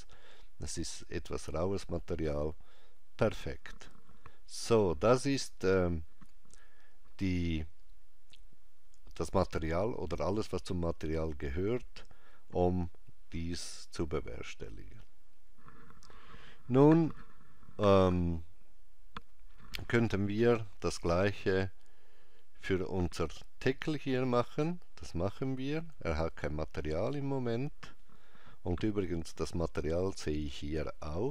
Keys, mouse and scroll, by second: 24.4 click, 30.0 click.